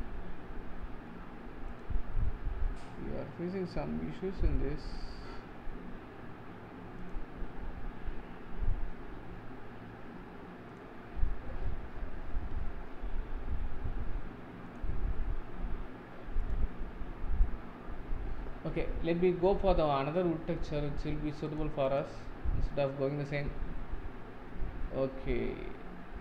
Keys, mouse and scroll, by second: 2.6-4.6 scroll down 13, 4.2 middle click, 5.0-6.0 scroll down 7, 7.1 click, 9.3 scroll down 5, 10.7 click, 11.1-14.7 scroll up 38, 14.7-19.5 drag.